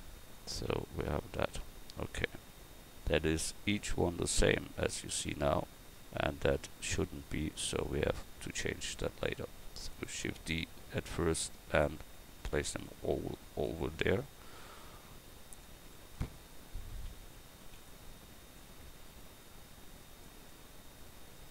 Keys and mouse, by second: 9.9 shift+d, 10.8-13.1 drag, 13.2 shift+d, 14.1-15.6 drag, 17.6 shift+d, 18.6-20.2 drag.